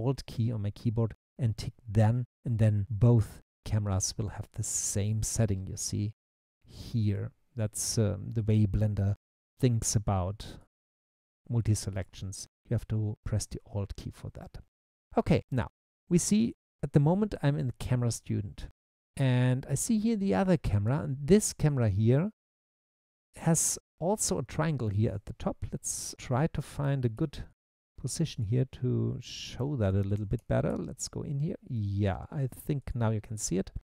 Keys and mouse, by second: 2.0 alt+click, 6.2 click, 7.1 click, 8.4 click, 10.6 click, 13.1 click, 27.2 q, 29.6-31.0 typing, 32.8 click.